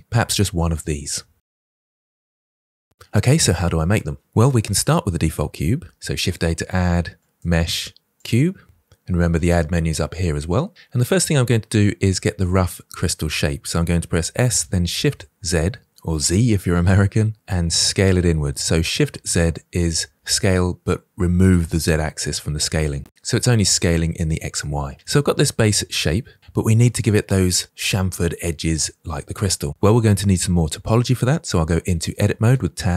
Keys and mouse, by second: 1.7 click, 1.7-2.9 middle drag, 5.8 shift+a, 9.4-10.7 drag, 12.3-13.2 middle drag, 14.1 s, 14.9 shift+z, 24.9-25.4 middle drag, 32.4 Tab.